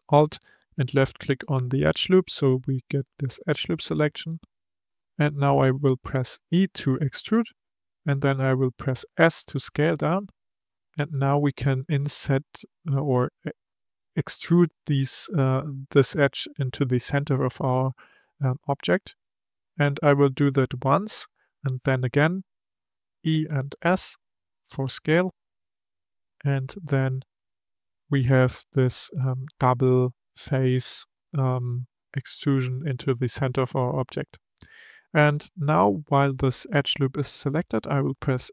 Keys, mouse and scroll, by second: 0.6 alt+click, 6.5 e, 22.9 e.